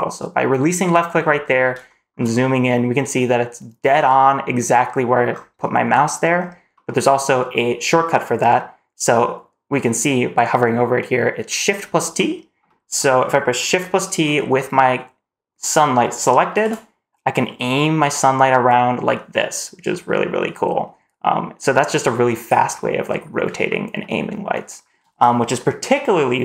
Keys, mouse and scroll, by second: 1.1-1.7 scroll up 4, 1.7 shift+middle drag, 2.2-3.0 middle drag, 5.1 scroll down 2, 6.2-6.6 scroll down 1, 6.6-6.9 middle drag, 6.6 scroll up 1, 7.0-8.1 scroll down 3, 8.1-10.4 scroll up 1, 11.6 scroll up 1, 12.0-12.4 middle drag, 12.5 middle drag, 16.4 shift+t, 22.6-23.0 middle drag, 23.1-23.5 scroll down 1, 23.5-23.8 middle drag, 24.6 scroll down 1.